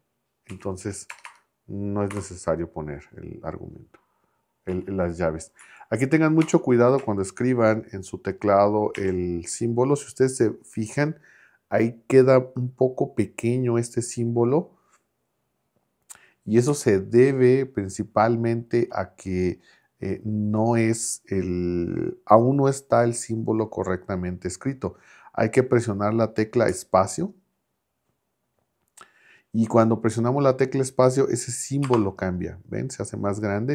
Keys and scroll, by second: 0.5 Right, 1.1 BackSpace, 2.1 n, 4.7 Right, 5.6 Left, 6.4 BackSpace, 9.0 shift+6, 16.7 Up, 31.8 space.